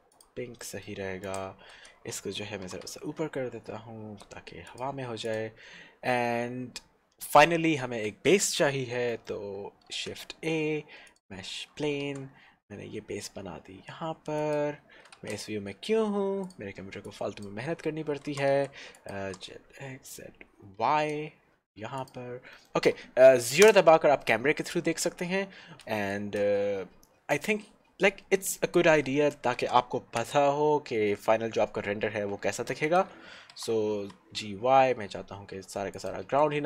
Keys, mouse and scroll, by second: 0.2 click, 0.7 middle click, 1.5 click, 2.9 g, 3.1 z, 4.7 click, 5.8-8.8 scroll down 1, 9.3 middle click, 10.1 shift+a, 11.1 click, 12.2 s, 14.8 click, 15.4 shift+z, 15.7 scroll down 1, 16.7 click, 17.8-18.3 scroll down 1, 18.3 g, 18.6 x, 19.1 click, 19.4 g, 20.7 y, 22.1 click, 22.6 middle click, 23.9 KP_0, 25.3-25.8 scroll up 1, 25.8-27.5 scroll down 1, 27.7-29.8 scroll up 1, 29.8 g, 30.3 x, 33.0 click, 33.8 g, 34.1 y, 36.2 click, 36.5 s.